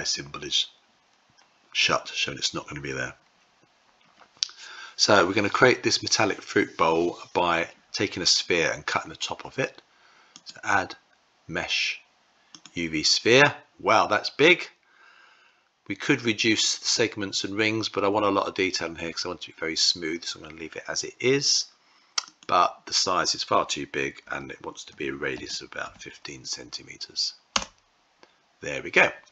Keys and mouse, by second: 10.2-12.6 drag, 22.3-29.3 drag.